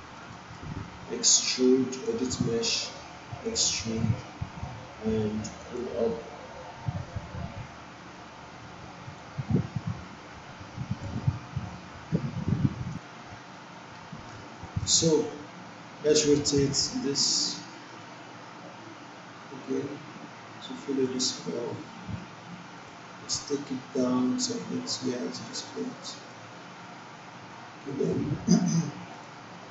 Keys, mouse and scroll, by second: 0.3 alt+middle click, 1.9 click, 3.5 click, 9.1-11.0 drag, 14.4-15.0 alt+middle drag, 16.5-21.2 drag, 29.1 click.